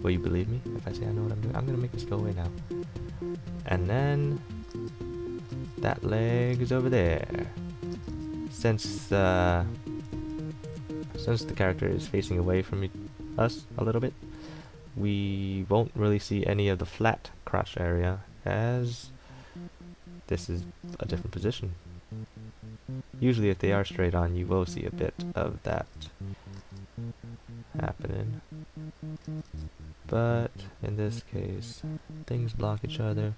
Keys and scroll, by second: 4.9 ctrl+z, 5.7 ctrl+z, 6.7 ctrl+z, 21.1 ctrl+z, 25.9 ctrl+z, 26.8 ctrl+z.